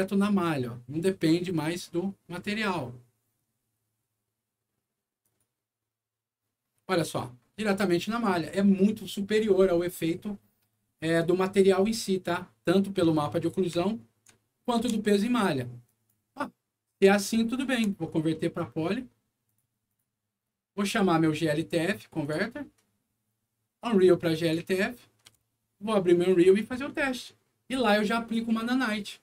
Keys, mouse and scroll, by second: 3.1 middle click, 5.1 click, 7.1 scroll up 1, 7.6 scroll down 1, 13.0 middle click, 13.8 alt+middle click, 14.3 alt+middle click, 14.7 F4, 15.8 click, 16.7 middle click, 17.0 scroll down 1, 17.5 ctrl+click, 18.0 ctrl+right click, 19.4 ctrl+click, 19.8 ctrl+click, 22.1 click, 24.3 click, 26.1 click.